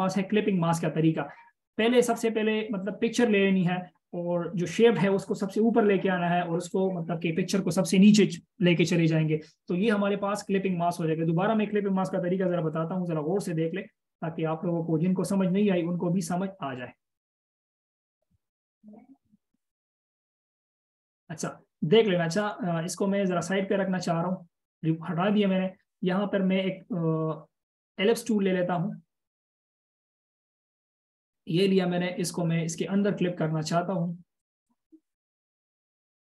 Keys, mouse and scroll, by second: 0.4-1.8 scroll up 1, 13.0 ctrl+z, 13.4 ctrl+z, 14.0 ctrl+z, 14.2 ctrl+z, 14.8 ctrl+z, 15.0 ctrl+z, 15.2 ctrl+z, 15.4 ctrl+z, 15.6 ctrl+z, 18.0 ctrl+z, 18.2-18.8 ctrl+z, 19.2 ctrl+z, 19.6 ctrl+z, 20.0 ctrl+z, 20.4 ctrl+z, 23.0 double click, 27.0 right click, 32.2 double click.